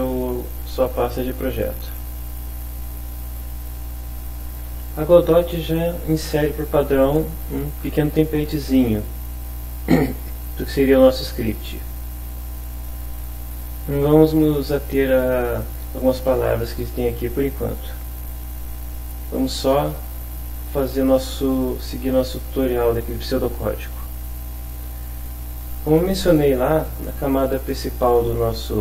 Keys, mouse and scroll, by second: 1.8 click, 3.2 click, 16.0 click, 18.8 click, 24.6 click, 25.4 click.